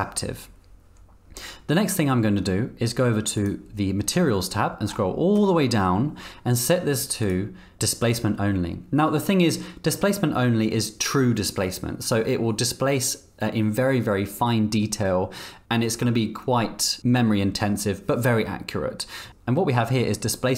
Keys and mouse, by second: 3.4 click, 7.3-20.5 drag.